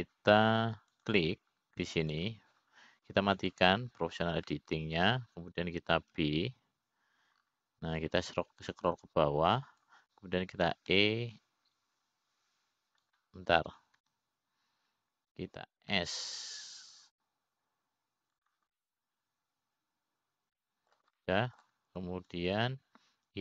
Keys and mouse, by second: 1.5 middle click, 3.6 click, 4.6 click, 6.1 click, 7.0 middle click, 8.8 ctrl+b, 13.3 e, 16.6 ctrl+z, 18.5 s, 21.3-23.4 middle drag.